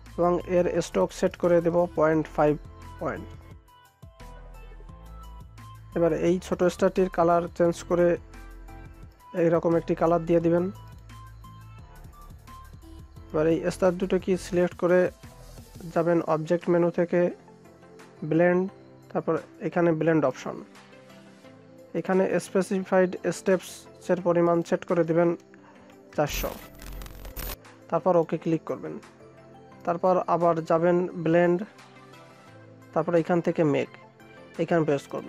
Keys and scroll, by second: 3.0 Return.